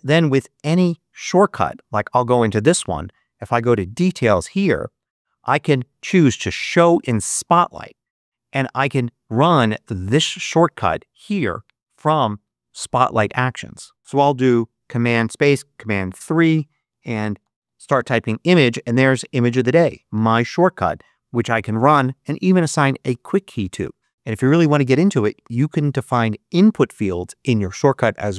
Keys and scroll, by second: 14.0 super+space, 15.3 super+3, 16.6-18.0 typing.